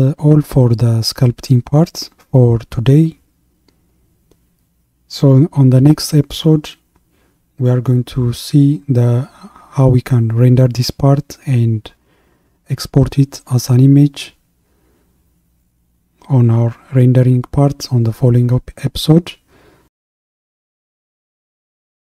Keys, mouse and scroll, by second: 4.2 click, 5.4 click, 5.9-6.2 scroll down 1, 6.3-9.7 middle drag.